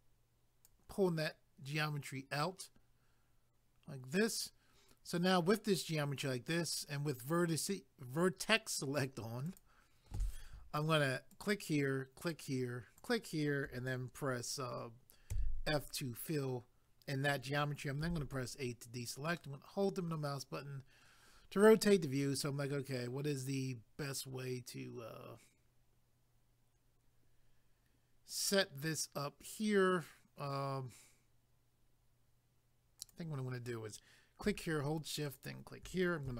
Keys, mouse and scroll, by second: 9.5 click, 11.3 shift+click, 12.3 shift+click, 19.4 middle click, 33.0 click, 35.3 shift+click.